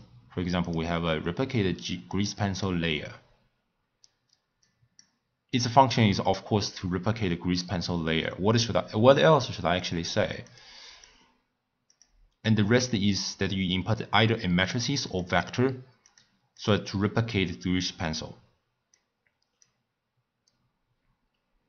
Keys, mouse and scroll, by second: 2.1-4.7 drag, 9.8-10.5 drag, 10.9-15.8 drag, 16.0-19.0 drag.